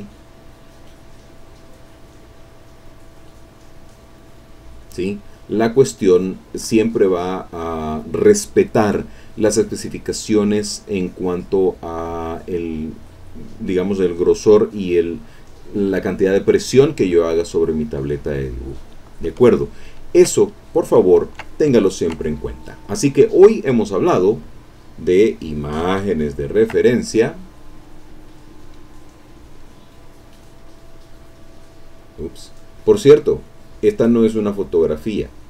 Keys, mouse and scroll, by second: 0.4 click, 1.7 click, 2.8-4.1 drag, 5.4 middle click, 5.9 middle click, 19.6 ctrl+middle click, 20.5 ctrl+middle click, 21.1 ctrl+middle click, 21.8 ctrl+middle click, 25.3 click, 25.6-26.8 middle drag, 27.8 click, 29.0 click, 30.9 click, 32.2 click, 32.8 click, 33.4-34.9 drag, 35.2 click.